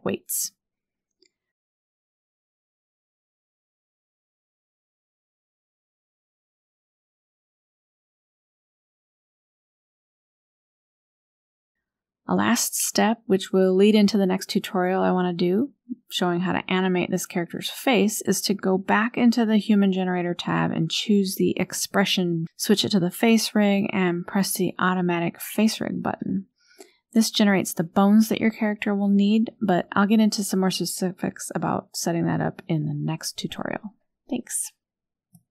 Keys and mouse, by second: 1.2 ctrl+p, 2.8 click, 3.3 shift+click, 3.4 drag, 3.9-4.4 drag, 4.8 click, 5.5-6.2 drag, 6.8 click, 7.1 click, 7.4-8.2 drag, 8.6 click, 8.9 r, 9.4 r, 10.0 drag, 10.4 r, 11.1 middle click, 11.6 click, 11.8 r, 14.2 KP_1, 14.2 click, 18.6-19.3 drag, 23.4 KP_1, 23.7 KP_Decimal, 24.8 shift+middle click, 27.6 click, 31.9 click, 33.4-35.5 middle drag.